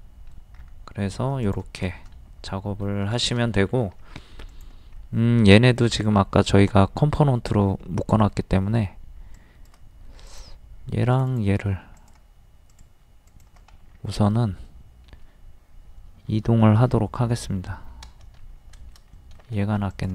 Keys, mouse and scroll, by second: 0.6-0.9 scroll up 1, 1.4 click, 2.1 middle click, 3.5 middle click, 4.5 click, 4.9-5.2 scroll up 1, 5.8 shift+middle click, 8.6-9.0 scroll up 1, 9.4 shift+click, 10.2 click, 11.1 shift+click, 12.0 click, 13.3 shift+click, 13.7 scroll up 1, 13.8-14.3 scroll down 1, 14.7 middle click, 16.7 m, 18.5 space, 19.1 middle click, 19.9 click.